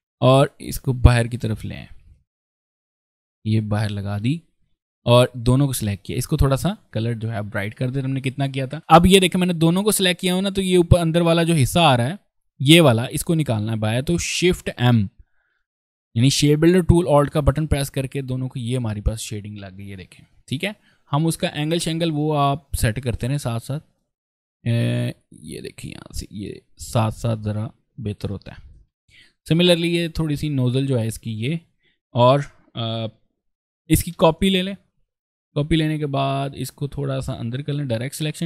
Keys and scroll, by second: 4.6 v, 18.2 alt+v, 18.7 ctrl+space, 21.2 ctrl+space, 21.6 v, 22.6 a, 28.2 v, 28.6 ctrl+space, 29.2 v, 32.9 p, 33.5 v, 33.9 ctrl+space, 36.0 alt+a, 38.2 v.